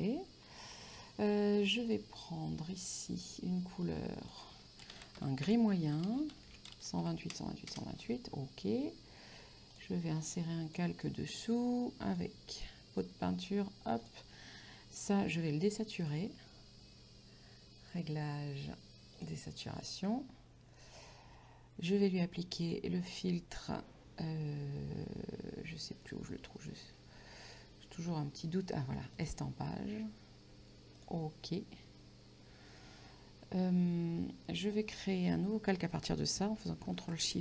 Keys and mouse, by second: 0.0 ctrl+), 1.7 click, 4.0 click, 5.0 KP_1, 5.2 KP_8, 5.5 Tab, 6.4-7.5 typing, 7.7 Return, 9.8 click, 12.2 click, 16.1 click, 19.2 click, 22.7 click, 29.2 click, 31.0 click.